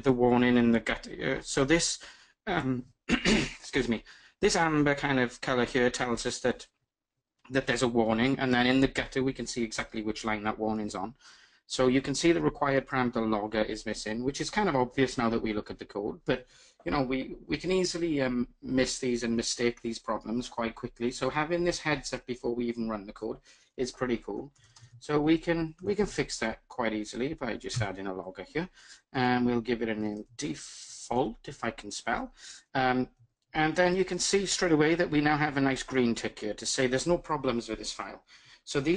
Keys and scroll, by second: 27.1 Return, 31.5 Tab, 32.2 super+z.